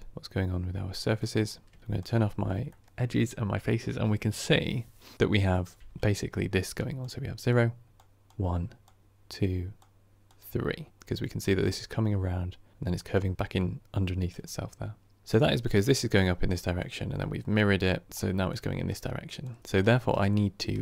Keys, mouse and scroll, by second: 0.1 click, 1.4 scroll down 2, 1.7 shift+middle drag, 1.9 click, 2.3 scroll up 1, 2.6 shift+middle drag, 2.9-6.8 scroll up 1, 6.9 click, 7.4 d, 7.8-9.2 drag, 9.2 d, 9.7-13.3 drag, 13.3-15.7 right drag, 15.7-20.1 drag, 20.1-20.8 right drag.